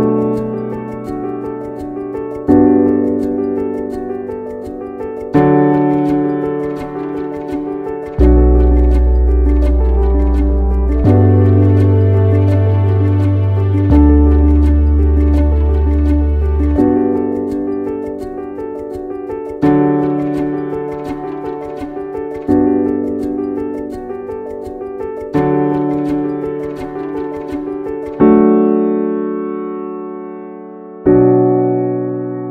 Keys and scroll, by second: 12.3 ctrl+a, 13.3 ctrl+x, 13.9 ctrl+v.